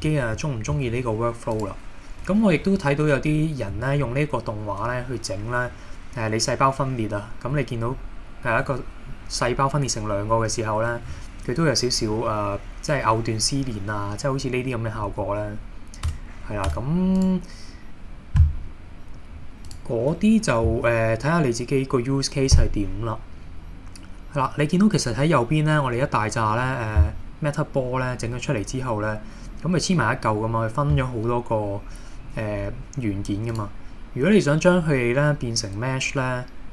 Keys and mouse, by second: 0.1 middle drag, 0.8 shift+d, 1.6 click, 2.7 KP_1, 3.8 shift+middle click, 16.1 Tab, 16.7 Tab, 17.2 click, 19.7-25.3 drag, 33.7-36.7 drag.